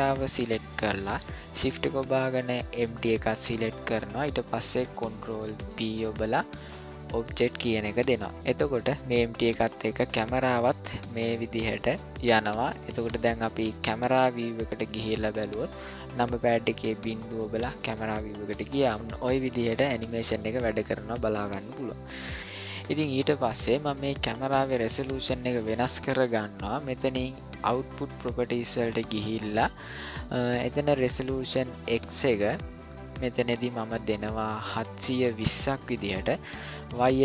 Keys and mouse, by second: 2.7 shift+click, 5.6 ctrl+p, 9.0-13.7 drag, 16.7 KP_0, 18.9-21.5 drag, 26.1-26.7 ctrl+middle drag, 28.3 click, 32.9-36.3 drag.